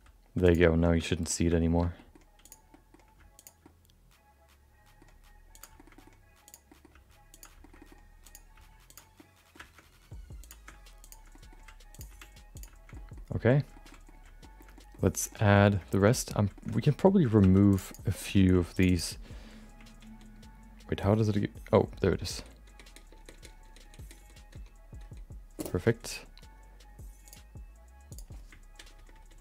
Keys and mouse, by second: 1.2 middle click, 1.6 shift+middle click, 2.0 middle click, 2.4 click, 2.7 middle click, 3.3 click, 3.6-5.0 middle drag, 5.1 g, 5.8 shift+middle click, 6.4 click, 6.7 middle click, 6.9 g, 7.8 middle click, 8.2 click, 8.5 g, 9.2 middle click, 10.4 click, 11.0 click, 11.3 middle click, 11.6 g, 12.1 r, 12.9 middle click, 13.8 middle click, 14.5 shift+middle click, 14.9 middle click, 15.3 middle click, 16.1 middle click, 16.6 middle click, 17.4 2, 17.7 click, 18.1 middle click, 18.7 shift+click, 18.8 shift+click, 20.4 ctrl+shift+KP_Add, 22.3 ctrl+shift+KP_Add, 22.6 ctrl+shift+KP_Add, 22.9 ctrl+shift+KP_Add, 23.0 ctrl+shift+KP_Add, 23.3 ctrl+shift+KP_Add, 23.5 ctrl+shift+KP_Add, 23.6 ctrl+shift+KP_Add, 23.8 ctrl+shift+KP_Add, 24.0 ctrl+shift+KP_Add, 24.2 ctrl+shift+KP_Add, 24.5 ctrl+shift+KP_Add, 25.0 ctrl+shift+KP_Add, 27.2 shift+click.